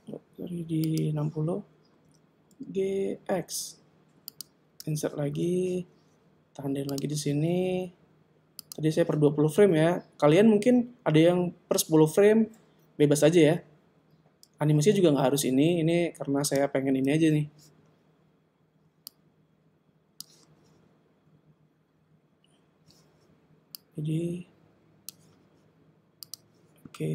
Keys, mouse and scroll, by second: 0.9 click, 2.0 g, 5.0 i, 6.9 click, 8.7 click, 13.5 g, 17.2 i, 19.2 click, 23.8 click, 26.2 click.